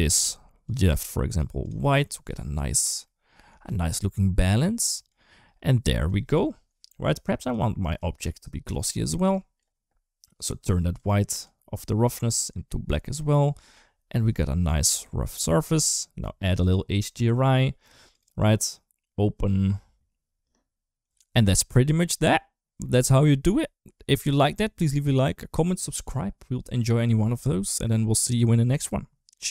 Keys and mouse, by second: 0.4 click, 0.7 click, 1.1 click, 1.4 click, 2.9 middle click, 3.5 shift+middle drag, 4.4 middle click, 7.2 click, 10.7 click, 13.6 middle click, 14.3 middle click, 16.4 click, 17.9 click, 22.7-23.7 middle drag, 24.4 middle click.